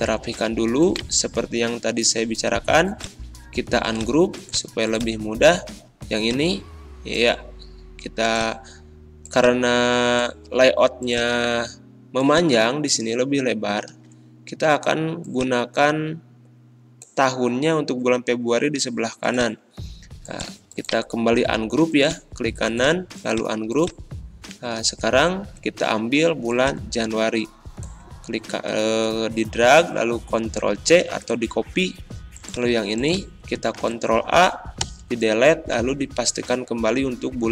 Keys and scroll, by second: 28.5 ctrl+c, 33.8 ctrl+a, 34.8 BackSpace, 35.8 ctrl+v.